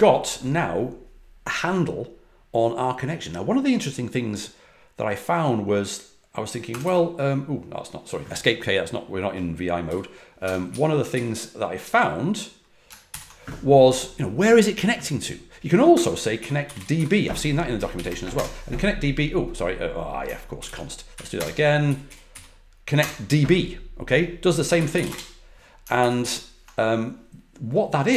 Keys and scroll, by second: 6.4-7.3 typing, 9.8-10.4 typing, 10.6 Page_Up, 11.1 Page_Up, 13.0 ctrl+l, 15.9-17.9 typing, 18.3 Return, 20.5 ctrl+d, 21.1 Up, 21.3 Return, 21.8 Up, 22.0 Up, 22.3 Down, 22.9 Return, 24.5-25.4 typing, 25.9 ctrl+c, 26.2 ctrl+c.